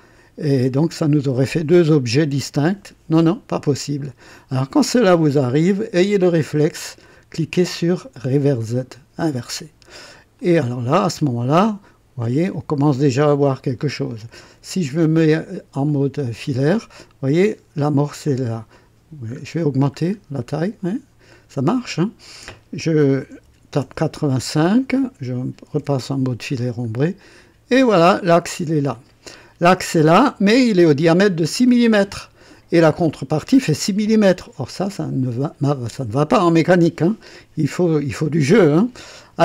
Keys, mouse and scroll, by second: 8.5 click, 10.3-12.4 drag, 15.9 click, 19.2-19.6 scroll up 1, 19.9 scroll up 1, 20.5 scroll up 1, 21.6 click, 23.2 KP_8, 23.6 KP_5, 23.8 Return, 25.7 &, 26.6-27.0 scroll down 1, 27.2-30.2 drag.